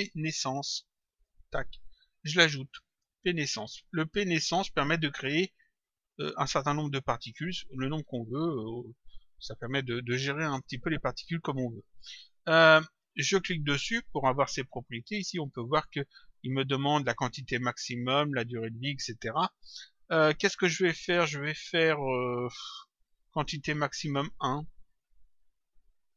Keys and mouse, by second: 6.0 click, 13.1 click, 14.8 click, 23.6 click.